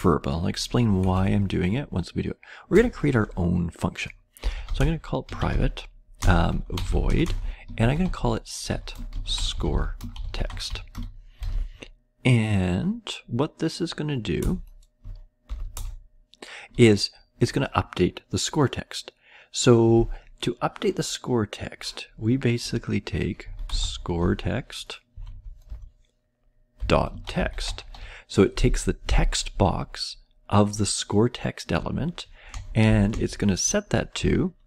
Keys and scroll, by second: 1.1 Up, 2.6 Return, 4.1-11.4 typing, 14.3 Return, 15.5 {, 15.7 Return, 23.1-24.6 typing, 25.2 Down, 25.6 Return, 26.5-28.4 typing, 32.2-32.9 typing, 34.5-34.6 typing.